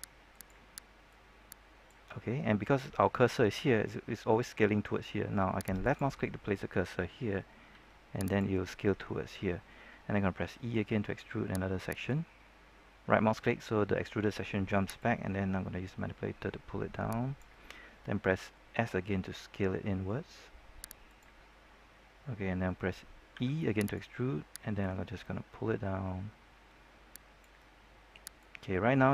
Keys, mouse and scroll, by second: 0.2-2.5 drag, 7.6 s, 8.2 click, 10.3 e, 11.8 right click, 14.9-17.7 drag, 18.7 s, 21.0 click, 23.3 e, 23.8 right click, 24.7-29.1 drag.